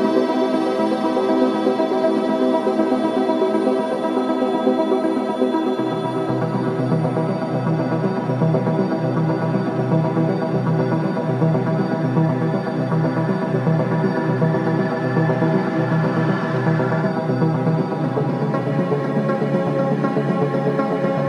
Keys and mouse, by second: 3.5-5.9 middle drag, 6.1 Tab, 7.2 ctrl+r, 10.0-11.9 drag, 11.8 Tab, 12.8 g, 14.4 click, 15.7 s, 16.1 click, 16.3 click, 16.4 click, 17.1 click, 17.2 g, 19.0 g, 21.2 click.